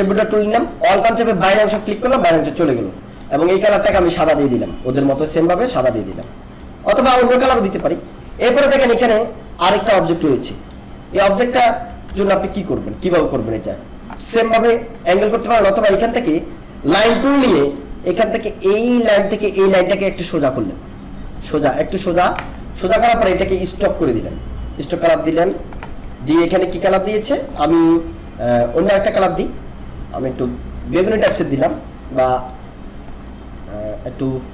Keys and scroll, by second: 12.0 ctrl+=.